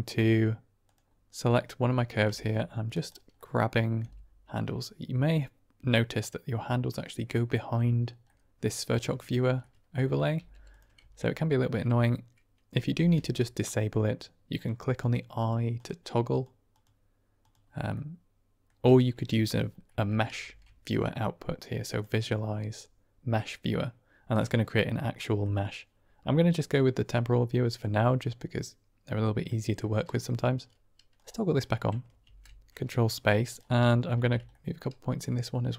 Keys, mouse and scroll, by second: 0.8 click, 1.4-2.0 middle drag, 2.2 Tab, 3.3 middle click, 3.9 g, 4.4 click, 5.1-7.0 middle drag, 7.0 click, 8.2 click, 9.1 shift+click, 9.5 click, 10.3 g, 10.6 click, 10.9 Tab, 12.9 ctrl+space, 13.6 click, 14.4 click, 14.9 click, 15.3 click, 15.7 click, 16.2 click, 16.6 click, 17.3 click, 17.8-18.6 middle drag, 19.8 middle click, 20.4 shift+a, 25.2 middle click, 27.0-27.7 middle drag, 29.4-29.7 middle drag, 31.0 click, 31.5 middle click, 32.2 ctrl+space, 32.7 drag, 33.8 drag, 34.1 Tab, 34.4-35.7 drag.